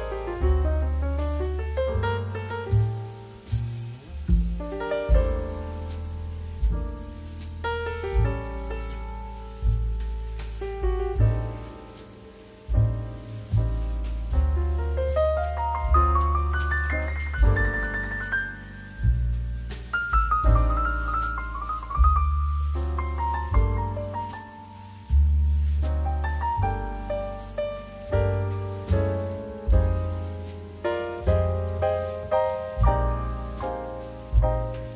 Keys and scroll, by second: 0.3-1.5 typing, 2.5 ctrl+z, 2.8 KP_2, 2.8 KP_2, 3.0 KP_Decimal, 3.1 KP_7, 3.4 Caps_Lock, 4.0 Tab, 4.6 KP_2, 4.6 Return, 5.1 m, 8.5 q, 10.2 q, 14.6 space, 19.4 space, 20.8 z, 25.4 q, 27.3 space, 28.5-31.3 typing, 32.6 space, 33.7 space.